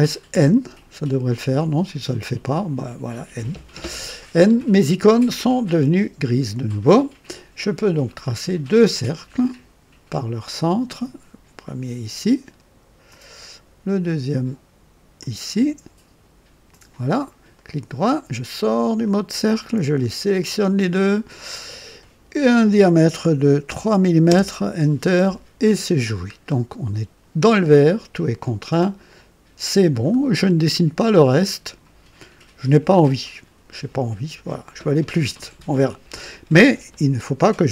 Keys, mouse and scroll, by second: 0.3 n, 1.8 click, 8.9 click, 11.6 click, 13.1 click, 15.2 click, 16.7 click, 17.6 right click, 19.0 click, 20.3 click, 21.5 click, 23.6 KP_3, 24.2 KP_Enter, 26.3 scroll down 2, 26.5 typing, 30.0-30.3 scroll down 1, 30.6-32.0 right drag, 33.2 click.